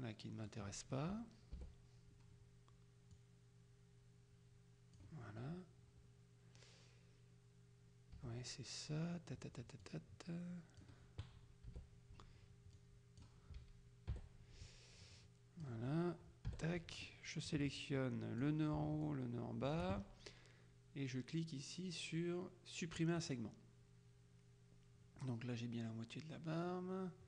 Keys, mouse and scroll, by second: 1.6 Delete, 3.2-5.6 drag, 8.2 Delete, 9.9 click, 11.8 Delete, 12.8 click, 14.2 Delete, 15.2 click, 16.6 Delete, 17.8-19.0 drag, 19.1 shift+click, 23.3 click.